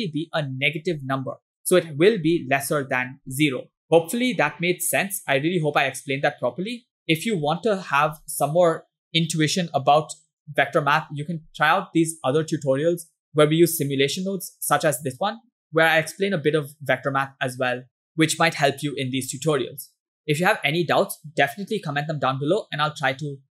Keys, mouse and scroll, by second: 2.4 click, 3.0 click, 4.5-7.4 ctrl+drag, 22.2-22.6 scroll down 2, 23.1-23.5 scroll up 1.